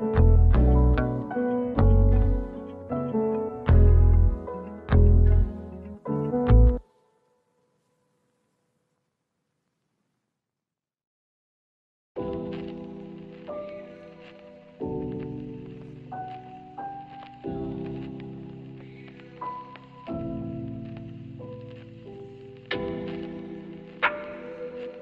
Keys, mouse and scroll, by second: 0.9 double click, 1.2 scroll down 1, 1.5 alt+click, 2.3 alt+middle click, 3.9 alt+click, 4.6 alt+click, 6.9 BackSpace, 8.2-8.8 scroll up 1, 9.4 right click, 10.8-11.1 scroll up 1, 11.2 alt+click, 12.4 scroll down 1, 12.6 alt+middle click, 13.4 ctrl+z, 14.2 alt+scroll down 1, 14.4 alt+middle click, 14.6-15.0 alt+scroll up 1, 15.0 alt+click, 16.2 alt+click, 17.4 alt+middle click, 19.5 double click, 21.9 alt+middle click, 22.3 alt+click, 24.0 double click, 24.3 scroll down 1, 24.5 alt+middle click, 24.8 alt+click.